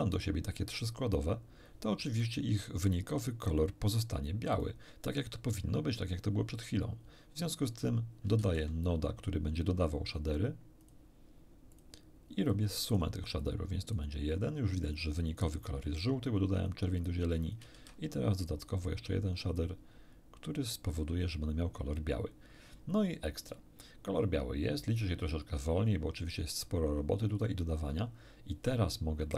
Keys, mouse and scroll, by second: 2.6-4.8 drag, 8.4 shift+a, 10.8 click, 11.7 click, 12.5-13.2 drag, 13.4-14.1 drag, 14.8 click, 16.6-17.7 drag, 17.8 shift+d, 18.4 shift+click, 19.6-20.9 drag.